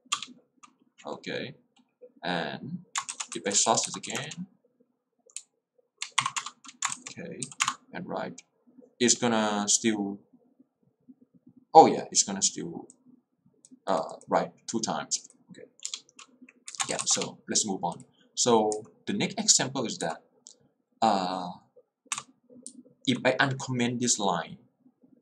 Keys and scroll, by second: 0.3 Return, 3.2-4.6 typing, 6.3 Up, 6.5 Return, 7.4 w, 7.6 Return, 15.9 Return, 16.8 Escape, 17.2 Return, 18.8 k, 20.1 j, 22.3 x, 22.8 l.